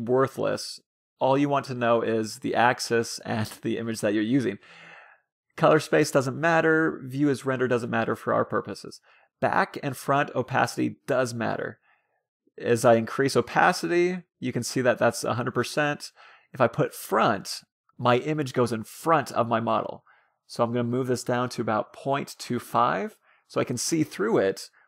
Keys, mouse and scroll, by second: 4.7-7.1 middle drag, 10.0-11.5 drag, 16.3-17.8 drag, 19.1-20.6 drag, 21.8-23.5 drag, 24.1-24.8 middle drag.